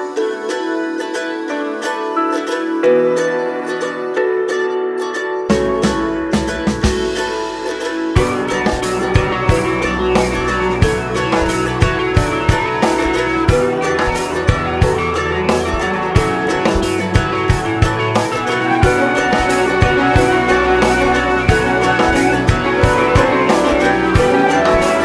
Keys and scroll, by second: 24.7 ctrl+t.